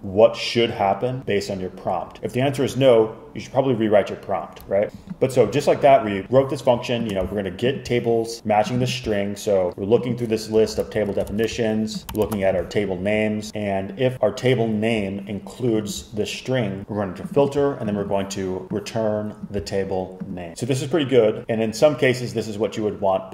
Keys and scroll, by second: 10.7 Up, 10.9 alt+Left, 11.4 shift+super+Right, 12.0 alt+Left, 12.2 alt+shift+Right, 12.3 alt+shift+Right.